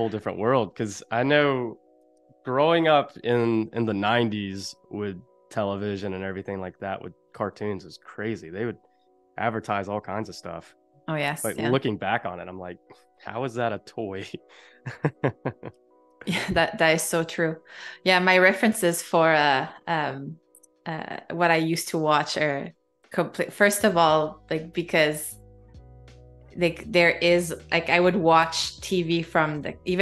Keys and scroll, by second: 2.0 space, 13.7 super+-, 15.1 space, 16.6 super+-, 17.0 space, 21.1 z, 21.8 a, 23.8 shift+b, 25.7 \, 27.3 shift+b, 27.8 ].